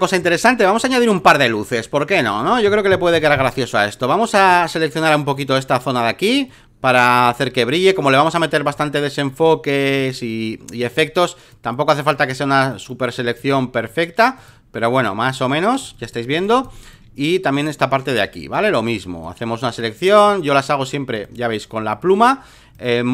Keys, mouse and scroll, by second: 0.0 alt+middle click, 0.2 alt+middle click, 0.4 alt+middle click, 0.6 space, 0.8 click, 2.0 click, 2.4 alt+middle click, 2.6 alt+middle click, 3.1 alt+middle click, 3.3 alt+middle click, 4.3-15.8 drag, 15.8 space, 15.9 click, 16.3 click, 16.6 click, 17.5-23.1 drag.